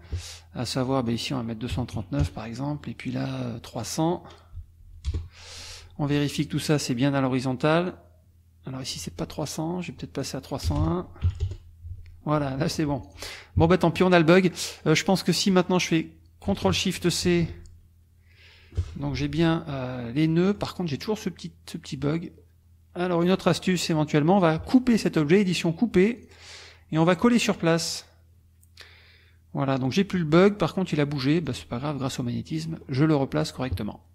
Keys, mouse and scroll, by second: 0.8 click, 1.7 KP_3, 1.9 KP_9, 2.2 KP_Enter, 3.7 click, 4.5 BackSpace, 5.1 Return, 6.3-8.1 drag, 9.9 click, 10.7 BackSpace, 11.2 KP_1, 11.4 KP_Enter, 12.9 F1, 13.0 click, 13.6 KP_Subtract, 14.7 click, 15.2 click, 17.2 ctrl+shift+c, 19.1 F2, 20.2 click, 23.2 click, 25.3 click, 26.2 click, 27.1 click, 27.8 click, 31.4-32.8 drag.